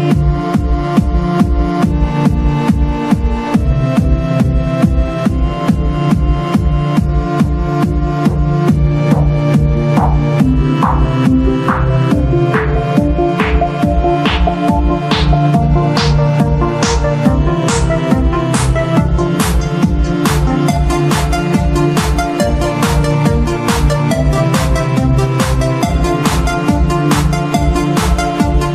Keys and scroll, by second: 2.7 z, 4.3 0, 4.5 v, 5.2 Right, 5.3 Left, 5.4 p, 9.2 v, 10.3 v, 11.3 g, 14.1 Right, 14.8-15.7 typing, 22.8 ctrl+shift+z, 24.1 p, 26.8 p.